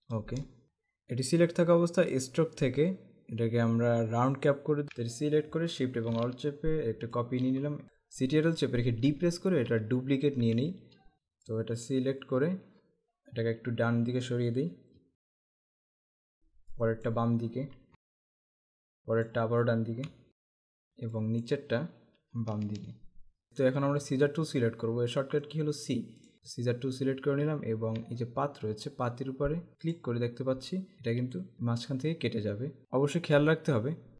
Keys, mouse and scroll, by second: 0.0-0.4 typing, 2.2 click, 4.5 click, 4.8 ctrl+z, 5.7 click, 9.1 ctrl+d, 9.7-10.4 typing, 11.1 click, 14.8 Right, 16.8 click, 18.0 Left, 19.0 click, 20.1 Right, 21.1 click, 22.4 Left, 23.5 right click, 24.2 click, 25.5 right click, 26.2 click, 27.7-28.7 alt+scroll up 2, 30.0 click, 30.9 alt+scroll down 1, 32.8 z.